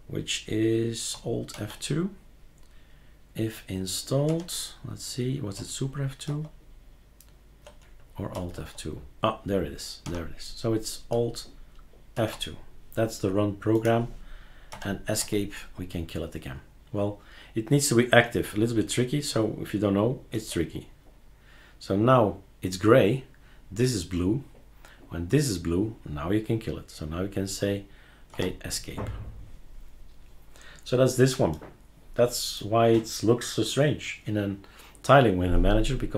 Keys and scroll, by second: 1.5 alt+é, 4.3 Escape, 6.3 super+F2, 8.3 alt+F2, 10.0 Escape, 12.1 alt+F2, 14.7 Escape, 15.2 Escape, 20.3 alt+F2, 28.3 Escape.